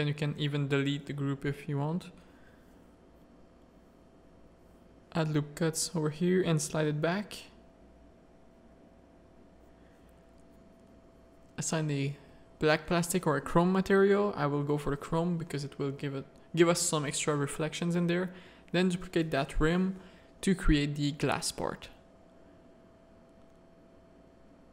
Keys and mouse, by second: 0.0 Tab, 0.2 a, 1.1 click, 1.6 Tab, 1.7 middle click, 2.2 Tab, 2.4 1, 3.5 middle click, 3.8 g, 6.8 Tab, 7.0 click, 9.1 Tab, 9.2 a, 11.0 z, 13.4 Tab, 13.8 click, 14.4 alt+a, 14.8 click, 15.3 Tab, 15.4 z, 15.6 a, 16.9 alt+click, 17.2 middle click, 17.8 shift+d, 18.4 click, 19.3 Tab, 19.6 click, 21.1 click, 21.6 click, 22.1 z, 22.5 click, 23.7 click, 24.2 click.